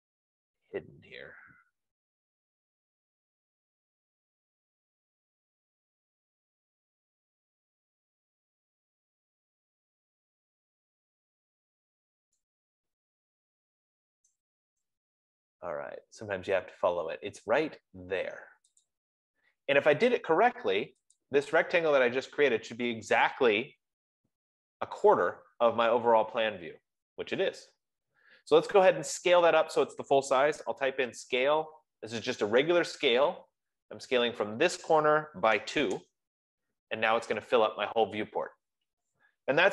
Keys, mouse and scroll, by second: 0.5-1.7 scroll, 1.7-2.2 scroll, 3.3-3.8 scroll, 4.1-4.6 scroll, 5.0-5.8 scroll, 5.8-6.1 scroll, 9.9-10.7 scroll, 10.7 scroll, 11.6-12.2 scroll, 12.7-13.2 scroll, 15.4 right click, 15.8-16.1 scroll, 16.8-17.3 scroll, 19.3 click, 21.7 click, 28.3-29.2 scroll, 29.6-30.2 scroll, 31.0-32.7 typing, 35.4 click, 35.9-36.7 typing, 36.2 click.